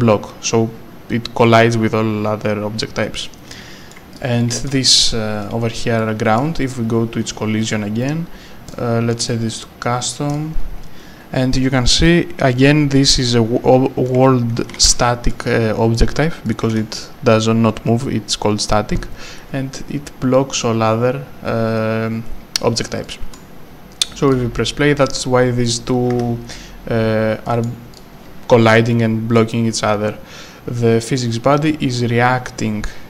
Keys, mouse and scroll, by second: 3.5-5.0 typing, 4.1 click, 4.4 right click, 5.8 scroll up 1, 6.0 right click, 6.6 scroll up 1, 7.2-7.6 scroll down 1, 7.6-8.7 scroll, 8.7 click, 14.1 right click, 14.8 q, 16.8 w, 23.2 s, 24.3 click, 26.2 Escape, 28.0 click.